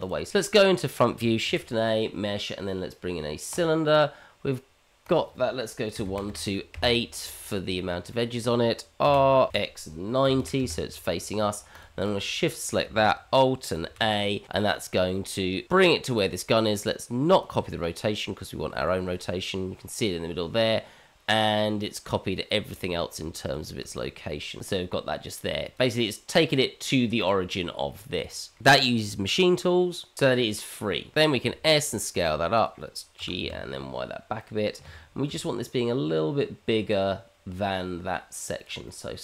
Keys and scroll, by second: 0.7 shift+a, 1.6 shift+a, 9.0 r, 13.9 alt+a, 18.7 shift+z, 23.1 shift+z, 31.4 s, 33.2 g, 35.3 s.